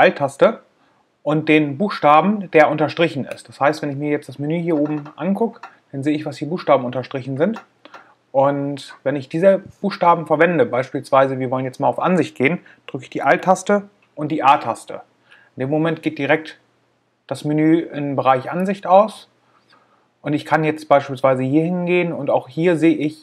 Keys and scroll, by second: 13.7 alt+a.